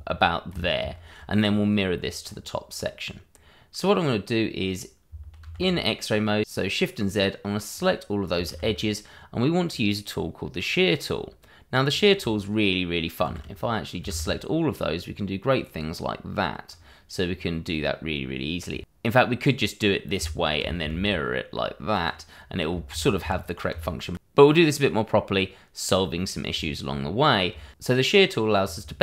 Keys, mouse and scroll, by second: 0.8 ctrl+z, 1.4-2.2 scroll down 1, 2.2-4.2 scroll up 1, 5.4 shift+z, 6.4-6.9 scroll up 1, 7.0 click, 8.9 shift+z, 9.6-11.9 scroll down 1, 11.9 click, 13.2 shift+z, 13.5 click, 14.1 shift+z, 15.0 click, 17.2-17.9 scroll down 1, 20.1 Tab, 20.9 alt+x, 21.9 click, 22.9 ctrl+z, 24.8-25.7 scroll up 1, 26.2 scroll down 1, 26.6 shift+middle click, 27.1-27.5 scroll up 1, 28.9 scroll down 1.